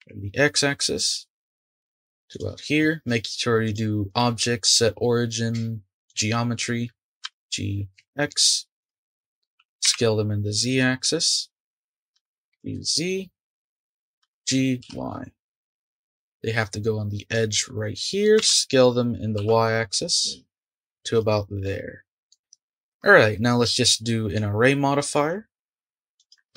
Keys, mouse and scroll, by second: 3.6-6.6 drag, 7.2 g, 9.1 shift+middle click, 9.6 s, 11.4-12.1 scroll up 4, 12.1 g, 14.2 g, 15.7-16.6 scroll up 3, 16.6-17.7 middle drag, 17.7-18.4 scroll up 1, 18.4 s, 21.6 scroll up 1, 21.6-23.4 middle drag, 24.0-25.0 middle drag, 26.2-26.5 drag.